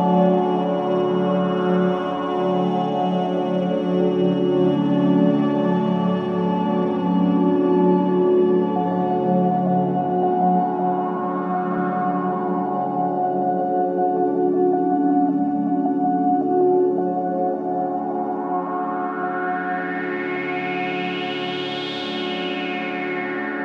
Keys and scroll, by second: 5.5 ctrl+space, 7.7 ctrl+s, 15.2 ctrl+j, 17.0 ctrl+space, 21.8 Return, 22.5 Return, 23.1 KP_0.